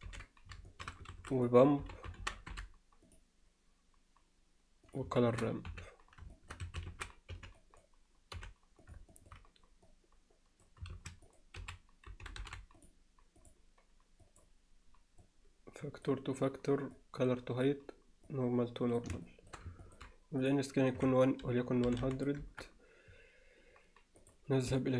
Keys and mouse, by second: 0.1 ctrl+t, 0.7 alt+shift+middle click, 1.1 shift+a, 5.2 alt+shift+middle click, 5.7 n, 6.3-6.8 alt+shift+middle drag, 6.8 a, 9.1 alt+shift+middle click, 9.9 click, 10.9 shift+a, 12.4 o, 14.2 click, 15.2-16.1 drag, 17.0-17.7 drag, 18.3-19.0 drag, 19.3 alt+shift+middle click, 19.8 ctrl+alt+middle click, 20.4-22.6 drag.